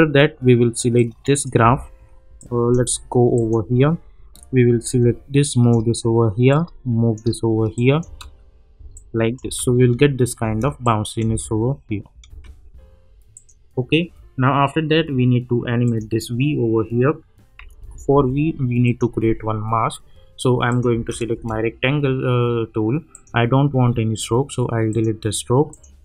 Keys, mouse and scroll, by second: 0.9 click, 1.6 =, 2.4-3.0 drag, 6.5-7.4 click, 8.0 space, 8.9-9.5 click, 9.4 space, 10.8-11.4 click, 11.2 space, 13.3 click, 15.8 click, 17.8 -, 18.1 -, 18.8 click, 20.9 space, 23.1 click.